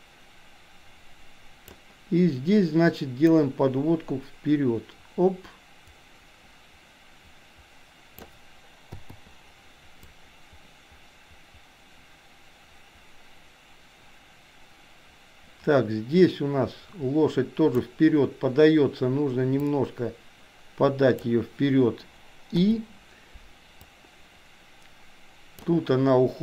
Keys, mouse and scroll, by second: 3.3-8.3 drag, 10.1-18.0 drag, 19.7 click, 20.0-21.5 drag, 24.0-25.7 drag.